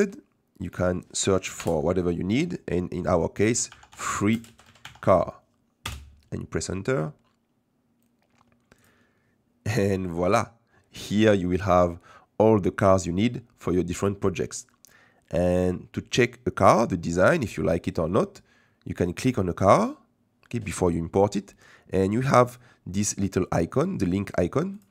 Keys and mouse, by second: 0.7-8.3 drag, 4.0 e, 8.9-19.7 drag, 24.7 click.